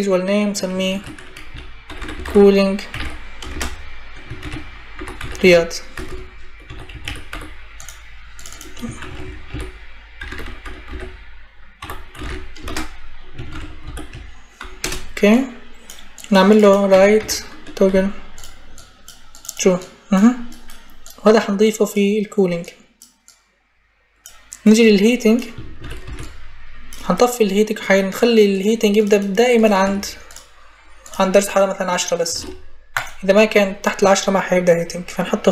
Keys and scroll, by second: 0.7-7.6 typing, 8.8-13.6 typing, 14.6 Return, 16.7 t, 16.9 o, 17.6 g, 25.6 ctrl+c, 25.8 ctrl+v, 29.6 Escape, 32.1 1, 32.6 0.